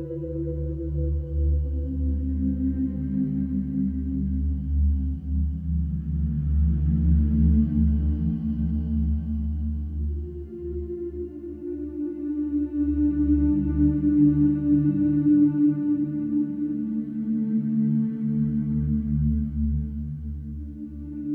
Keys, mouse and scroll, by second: 0.0 alt+shift+click, 0.8 alt+shift+click, 1.6 ctrl+b, 3.9 click, 4.3 alt+click, 4.7 alt+click, 5.5 scroll down 2, 6.6 alt+shift+click, 7.0 scroll up 1, 7.3-8.2 scroll down 1, 8.2 alt+e, 11.6 ctrl+b, 17.9 alt+click, 18.9 click, 19.6 alt+click, 20.5 ctrl+b.